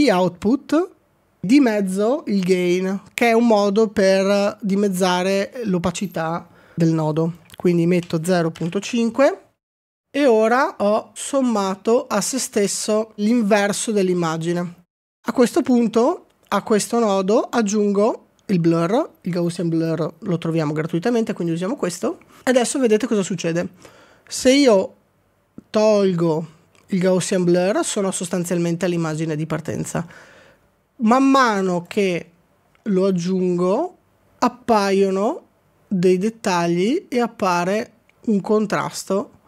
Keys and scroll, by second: 9.9 Return, 10.8 ctrl+d, 11.3 ctrl+d.